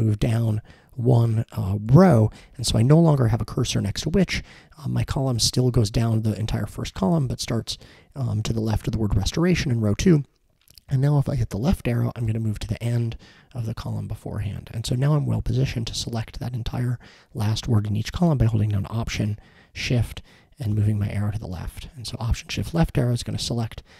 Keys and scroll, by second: 1.9 Down, 12.3 Left, 20.7 alt+shift+Left.